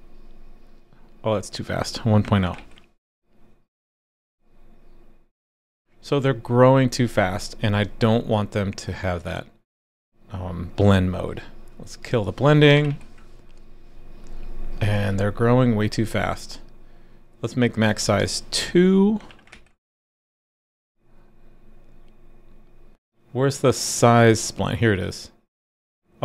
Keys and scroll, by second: 2.5 super+s, 12.7 super+/, 12.9 super+s, 19.5 super+s.